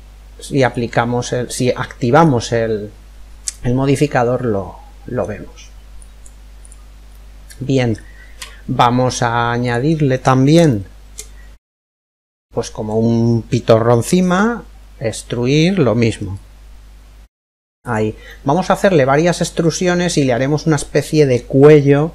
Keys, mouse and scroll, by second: 0.2 click, 3.1-5.0 middle drag, 5.6 click, 6.8-8.6 middle drag, 7.9 Tab, 9.3 Tab, 10.3-13.9 middle drag, 11.6-13.3 right drag, 14.0 e, 17.9-19.7 middle drag.